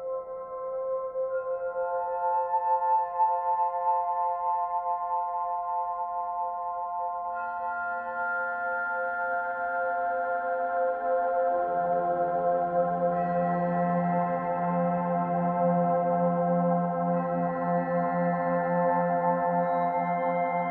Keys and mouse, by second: 1.3 click, 2.3 shift+s, 2.9 click, 5.8 a, 6.9-8.1 drag, 8.8 typing, 11.1 shift+click, 12.1 Tab, 12.9-17.6 drag, 14.2 typing, 16.7 typing, 17.8 click, 19.8 click, 20.1 typing.